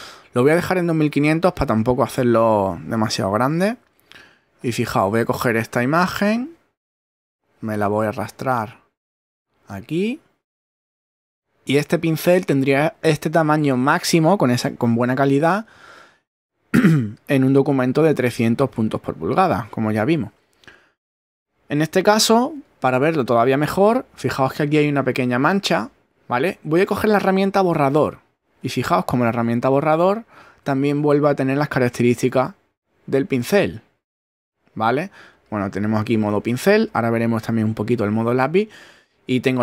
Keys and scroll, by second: 30.0 shift+<.